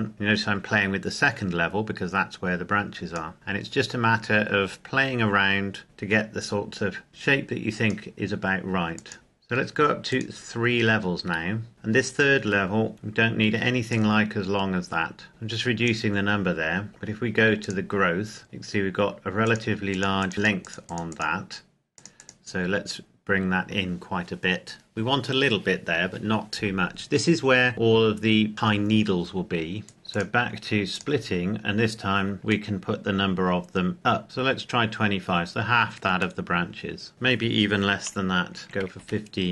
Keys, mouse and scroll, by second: 11.7-12.9 scroll up 1, 13.9 click, 19.4 click, 27.7-28.6 scroll up 1, 29.8 click, 32.4 click, 34.2 KP_Enter, 36.3 middle click, 37.1 click, 38.6 KP_5, 38.9 KP_Enter.